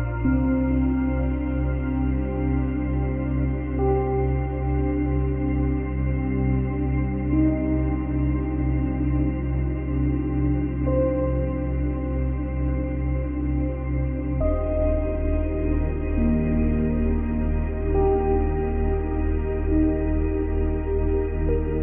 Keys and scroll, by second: 19.2 space.